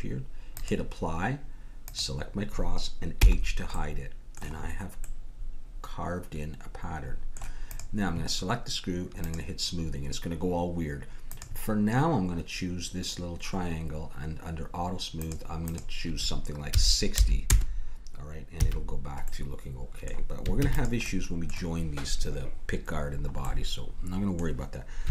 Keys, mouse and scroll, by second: 0.5-3.7 drag, 3.2 h, 3.9-6.2 middle drag, 7.7-11.1 drag, 11.3-13.2 drag, 15.2-17.5 drag, 18.6 a, 20.6 ctrl+s.